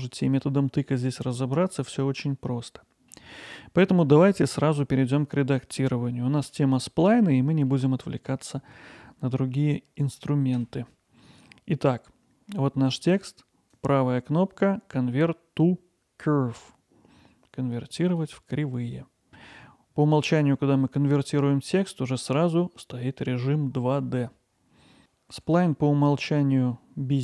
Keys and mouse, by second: 2.5 middle click, 10.6 Tab, 13.8-19.4 right drag, 25.0 click, 25.3 g.